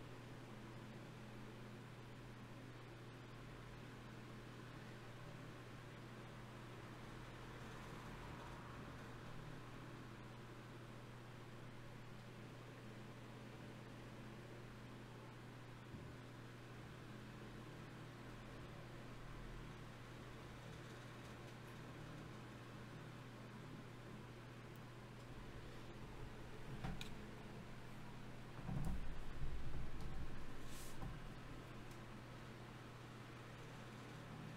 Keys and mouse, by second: 4.9 g, 5.9-7.5 right drag, 6.7 g, 13.1 f, 14.7 ctrl+r, 18.9 ctrl+Tab, 20.2-21.7 drag, 25.0-34.5 middle drag.